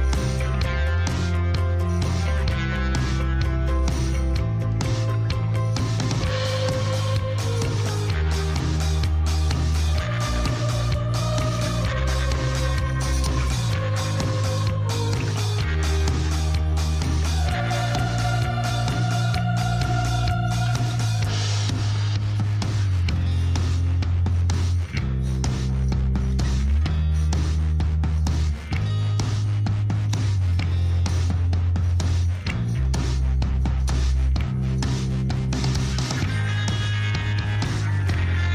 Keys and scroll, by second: 0.6 g, 1.4 z, 7.0 shift+z, 12.1 Tab, 17.3 Tab, 18.1 a, 22.5 Tab, 36.6 /, 38.1 Tab.